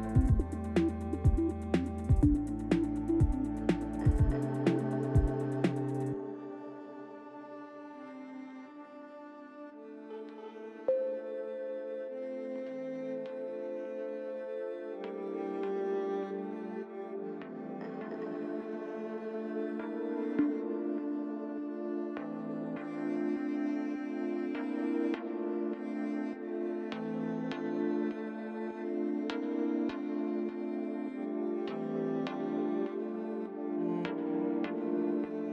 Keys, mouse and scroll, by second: 6.0 click, 10.2 click, 10.9 Tab, 12.2 click, 13.7 click, 16.2 middle click, 17.4 Tab, 17.8 click, 19.2 l, 20.5 middle click, 22.3 l, 24.6 click, 25.7 click, 26.3 click, 30.5 KP_Enter, 32.8 click, 34.0 click.